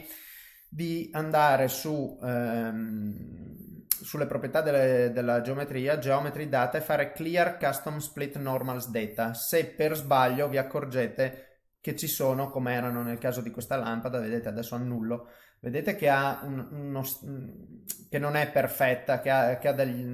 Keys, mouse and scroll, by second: 2.4 click, 6.2 click, 7.9 click, 13.5 click, 14.9 ctrl+z, 15.1 middle click, 16.6 middle click, 18.7 middle click, 19.4 middle click.